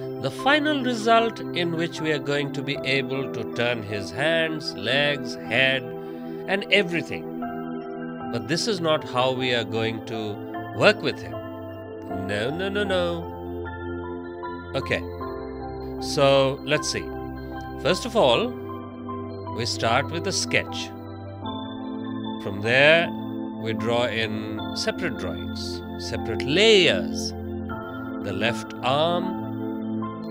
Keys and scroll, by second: 7.0 space, 18.6 space.